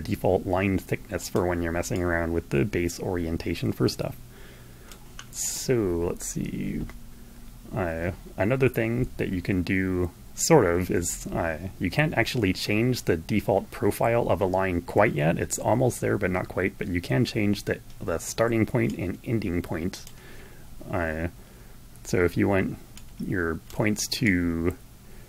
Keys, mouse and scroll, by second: 1.6-4.9 drag, 18.5-20.0 drag, 22.7 click, 23.8-25.2 drag.